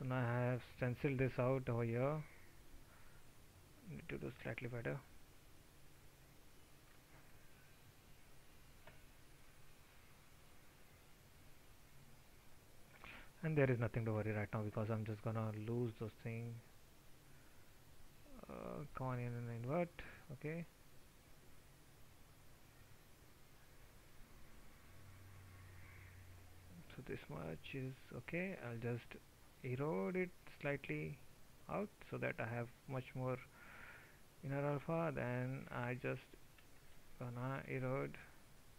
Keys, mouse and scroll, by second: 36.8 ctrl+z.